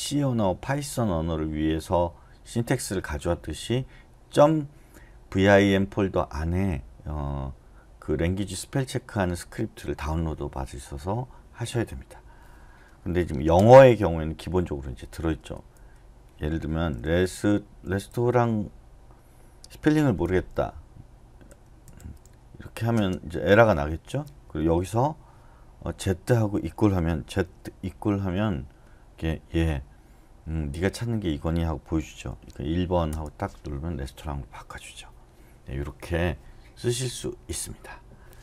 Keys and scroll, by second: 14.6-18.6 typing, 20.3 r, 21.6-22.9 typing, 23.2 Escape, 24.4 Left, 27.4-27.9 typing, 32.3 1, 33.1 Return.